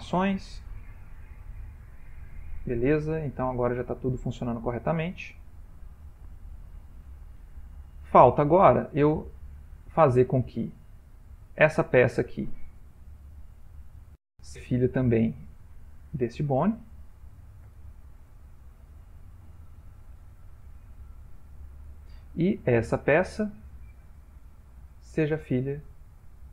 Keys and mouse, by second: 0.1 shift+middle click, 1.1 click, 3.4 middle click, 3.7 middle click, 3.8 middle click, 4.4 ctrl+middle click, 5.0-6.0 ctrl+middle click, 5.9 ctrl+middle click, 6.0 middle click, 7.3 middle click, 8.7 middle click, 11.5 middle click, 12.3 click, 13.8 middle click, 14.9 click, 16.4 shift+click, 17.6 ctrl+p, 20.7-21.3 shift+middle click, 21.0 shift+middle click, 22.9 click, 24.0 middle click, 24.3 middle click, 26.1 shift+click.